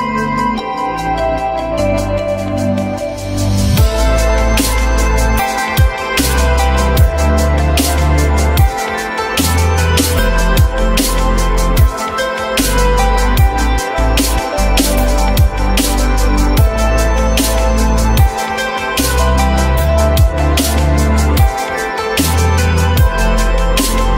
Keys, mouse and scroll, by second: 4.9-7.0 drag, 8.2-9.4 alt+middle drag, 9.4-11.5 alt+scroll up 2, 17.9 typing, 18.4 Return, 19.8-24.1 drag.